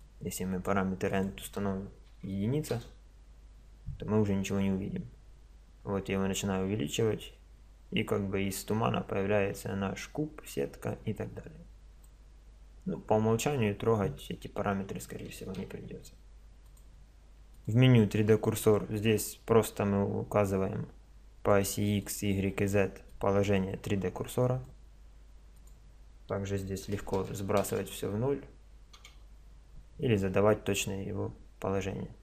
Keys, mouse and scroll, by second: 0.0-2.8 drag, 4.5 click, 16.6-19.3 drag, 20.5-24.8 drag, 25.5 click.